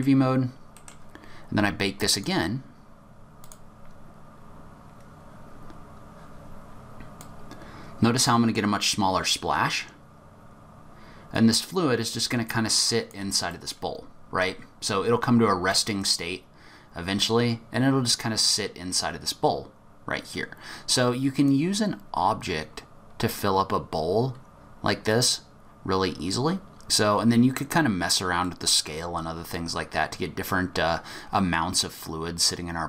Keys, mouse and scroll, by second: 0.1-2.1 scroll down 6, 0.8 middle click, 2.1 click, 3.4 click, 7.2 click, 13.5 middle click, 13.9-14.8 scroll up 5, 14.8-15.1 scroll up 1, 15.7 click, 26.9-27.2 scroll down 1, 28.4 middle click, 29.5 click.